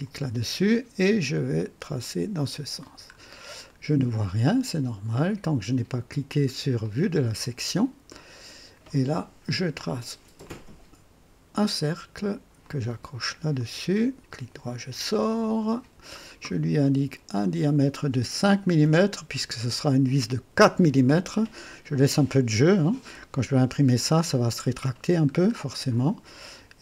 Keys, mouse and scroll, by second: 1.9 click, 3.1 scroll up 2, 3.6-4.3 right drag, 6.8 click, 7.6-7.9 scroll up 2, 8.1-8.9 right drag, 10.4 click, 12.6 click, 13.6 click, 14.3 right click, 15.5 click, 17.4 click, 18.8 KP_5, 20.5 KP_Enter, 25.5 scroll up 2.